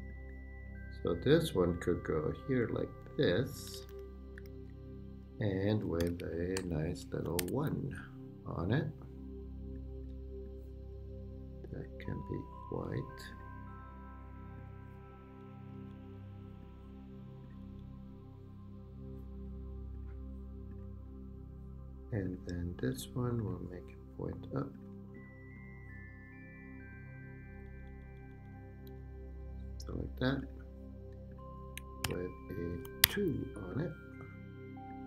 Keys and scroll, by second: 3.4 Right, 5.7 /, 6.2 a, 6.6 Return, 7.4 i, 7.9 Return, 12.1 Up, 15.4 Up, 28.9 Down, 32.0 super+d, 32.7 super+Return, 33.0 2.